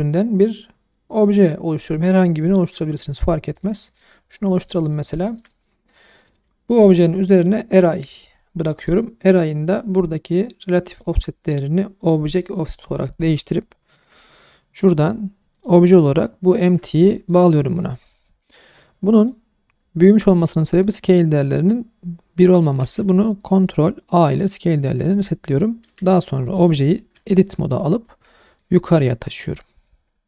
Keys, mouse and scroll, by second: 4.0-4.4 middle drag, 4.6 middle drag, 4.9 scroll up 2, 5.2 shift+middle drag, 5.5 middle drag, 6.3 click, 7.4 click, 8.7 middle click, 10.9 click, 12.2 click, 13.9 click, 15.5 click, 18.0-18.6 scroll down 2, 19.2 click, 20.2-20.7 scroll up 2, 22.8 ctrl+a, 26.2-26.7 middle drag, 27.1 Tab, 28.6 click.